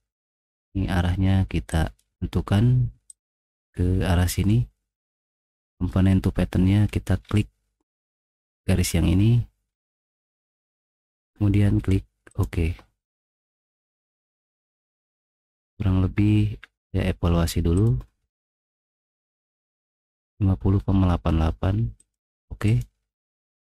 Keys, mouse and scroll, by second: 3.1 click, 3.9 middle click, 6.4 middle click, 6.8 middle click, 7.2 middle click, 7.9 click, 9.8 middle click, 9.8-10.3 scroll down 4, 10.0 middle click, 13.3 middle click, 13.6 middle click, 14.1 middle click, 15.5 click, 17.7 click, 18.9 click, 22.0 click, 22.7 click.